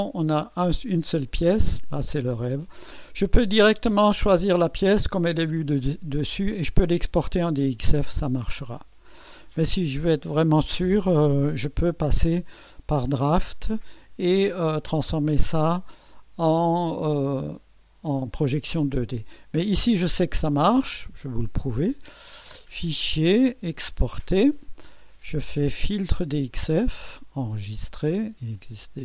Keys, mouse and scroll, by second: 4.6 click, 21.7 click, 24.0 click, 26.2 click, 27.3 click, 28.5 click.